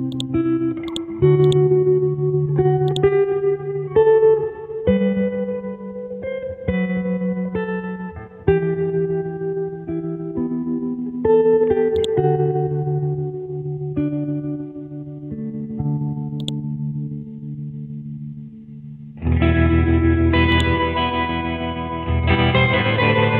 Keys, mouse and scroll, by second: 0.1-4.2 drag, 4.9 KP_6, 6.0 Tab, 6.4 KP_9, 7.3 Return, 9.3 p, 11.9 click.